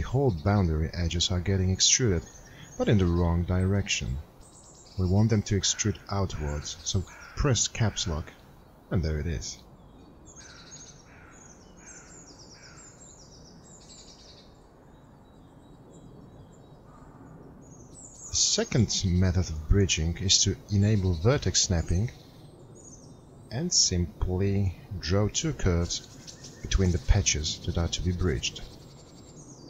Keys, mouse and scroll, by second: 9.9 Caps_Lock.